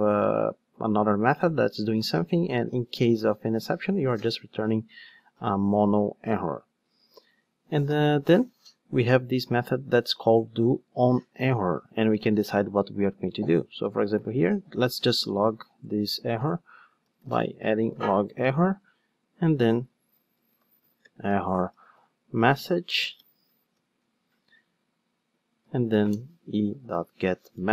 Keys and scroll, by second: 11.7 Return, 18.3 Return, 26.1 Return.